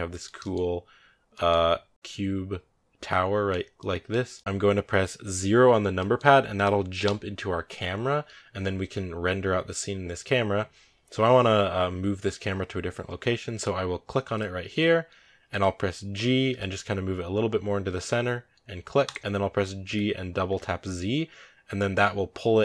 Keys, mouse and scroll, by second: 6.9 KP_0, 14.2 right click, 16.4 g, 19.7 g.